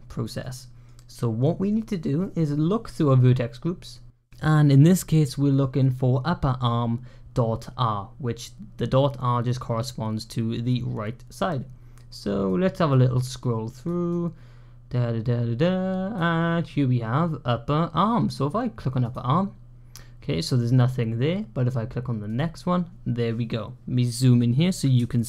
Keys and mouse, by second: 0.2-0.7 middle drag, 2.8-3.7 drag, 9.6 middle click, 12.4 click, 13.3 click, 14.1-16.1 drag, 18.9 click, 22.1 click, 25.0-25.2 shift+middle drag.